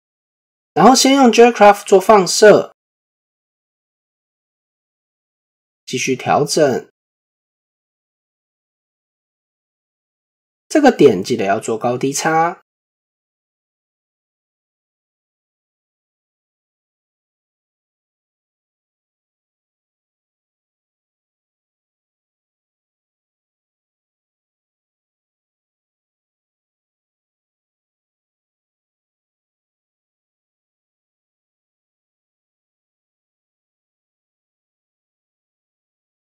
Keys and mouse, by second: 0.8 click, 1.8-3.7 drag, 4.7 click, 5.2 shift+middle drag, 6.1 Tab, 6.7 shift+middle click, 11.0 click, 12.9 click, 15.1 middle click, 17.1 middle click, 23.4-25.9 drag, 26.9 shift+middle click, 30.5 s, 31.0 click, 32.8 s, 33.5 click, 34.2-36.2 drag.